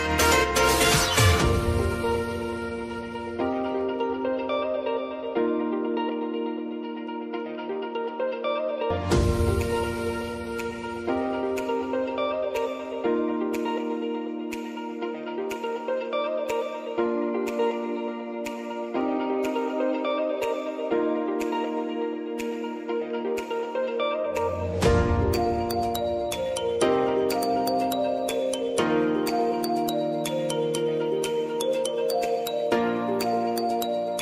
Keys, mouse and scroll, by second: 0.5 click, 1.5 Return, 2.7 click, 5.6 Return, 6.8 click, 7.8 Return, 9.4 click, 9.9 t, 10.7 click, 11.6 Return, 12.5 space, 14.6 click, 14.8-15.4 typing, 15.9 click, 17.1 ctrl+d, 18.3-19.8 drag, 19.8 [, 20.3 click, 20.5 space, 21.9 click, 24.7 Return, 25.4 space, 28.0 click, 29.9 ctrl+d.